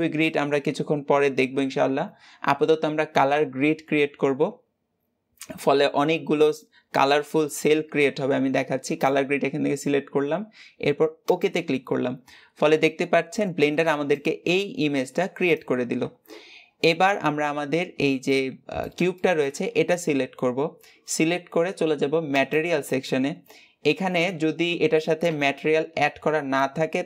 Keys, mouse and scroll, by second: 18.2-27.0 middle drag.